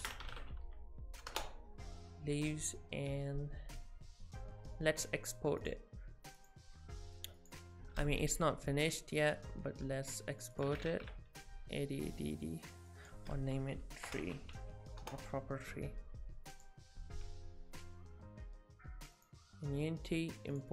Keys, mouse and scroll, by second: 5.6 click.